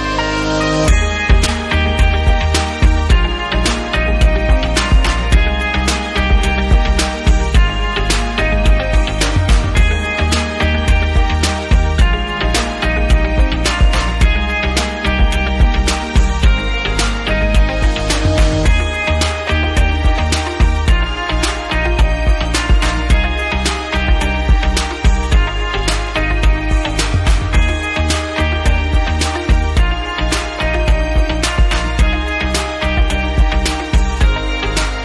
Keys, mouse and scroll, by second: 0.2 click, 1.2 click, 2.1 click, 2.6 click, 7.8 click, 9.6 click, 10.7 click, 10.9 click, 11.5-12.3 typing, 12.8 Return, 12.8 click, 13.7 click, 15.8 click, 16.5 click, 17.6 click, 19.3 click, 21.4 click, 22.5 click, 23.3 click, 24.9 click, 25.4 click, 25.4 double click, 26.8 right click, 28.3 click, 29.4 right click, 29.5 double right click, 30.0 click, 31.3 click, 33.1 click, 34.5 click.